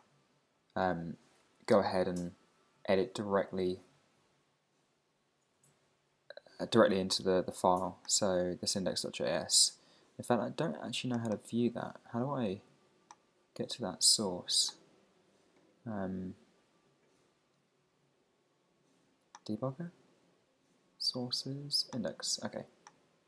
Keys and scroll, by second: 1.6 ctrl+alt+super+Up.